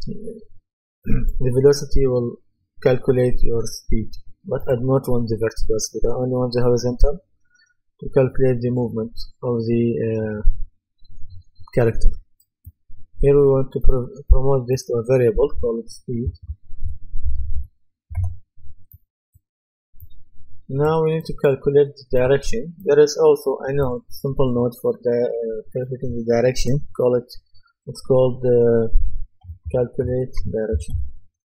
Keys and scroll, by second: 16.1-18.0 typing, 18.2 Return, 29.2-31.4 typing.